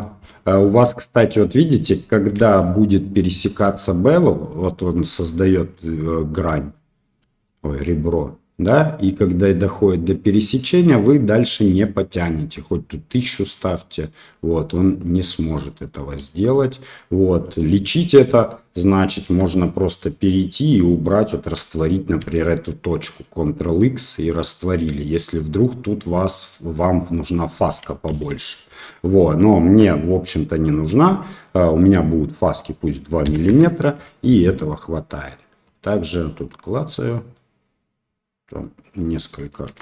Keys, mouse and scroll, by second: 0.9 middle drag, 2.3 shift+z, 2.7 middle click, 4.0 middle click, 5.7-6.8 drag, 7.4-17.2 shift+drag, 17.6 middle click, 18.8 click, 19.3 Tab, 19.9 right click, 20.6 click, 22.2 ctrl+x, 28.1 ctrl+z, 28.6 middle click, 31.0 Tab, 32.5-34.0 drag, 35.6 click, 36.3 click, 36.9-37.3 middle drag, 38.6 click, 38.9 middle click, 39.7 Tab.